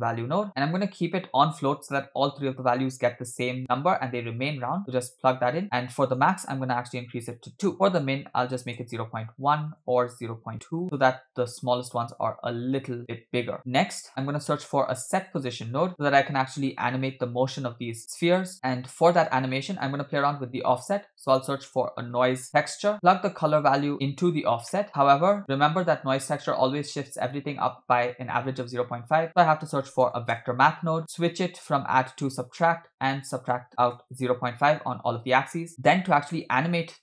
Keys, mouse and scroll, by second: 1.7 click, 4.8-5.6 drag, 6.1-7.2 drag, 7.7-8.9 drag, 9.7-10.8 drag, 13.6-13.9 scroll down 6, 13.9 middle click, 14.8 shift+a, 18.0 click, 18.5 middle click, 18.9 click, 19.5 middle click, 19.8 scroll up 1, 20.5 scroll up 2, 20.6 shift+a, 23.1-24.6 drag, 24.7 middle click, 24.9 scroll up 1, 25.4 click, 28.8 shift+a, 31.6-32.8 drag, 33.2-34.3 shift+drag, 35.5 scroll down 1, 35.7 click, 36.0-36.3 scroll up 3, 36.3 middle click.